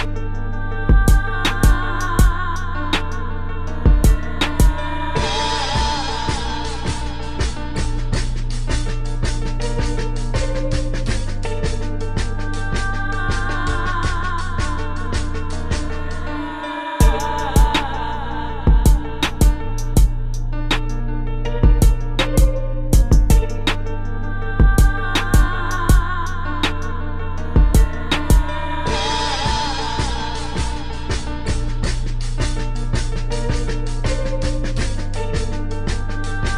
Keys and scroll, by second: 3.6 space, 5.4 space, 6.4 space, 8.6 space, 14.7 space, 18.2 space, 19.2 space, 19.7 space, 22.0 space, 24.0 space, 24.6 space, 25.7 space, 26.3 space, 32.3 space.